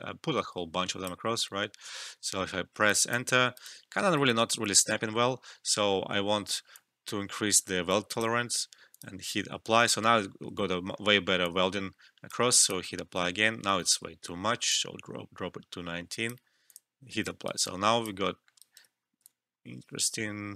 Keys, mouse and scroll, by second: 2.3 Return, 2.8 alt+click, 3.5 alt+right click, 3.8 alt+middle click, 4.2 ctrl+z, 6.7-10.3 drag, 10.5 ctrl+z, 11.4-13.5 drag, 13.6 ctrl+z, 14.7-16.9 drag, 17.4 alt+right click, 17.6 alt+click, 18.3 alt+middle click, 18.6 alt+right click, 19.4-20.5 alt+drag.